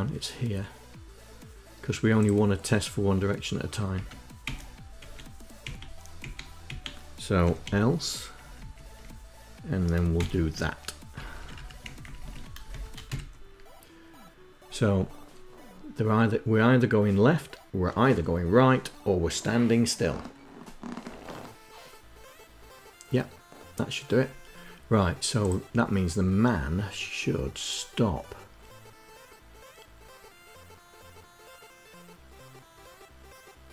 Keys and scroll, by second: 3.8 Tab, 4.2 Delete, 4.7 Delete, 5.4 Delete, 6.0 Delete, 6.4 Delete, 7.0-7.9 typing, 8.2 Down, 8.4 Down, 8.7 Down, 9.9 shift+Insert, 10.9 Up, 11.4 Up, 11.6 shift+Down, 11.8 shift+Down, 12.0 shift+Down, 12.5 shift+Tab, 12.8 Up.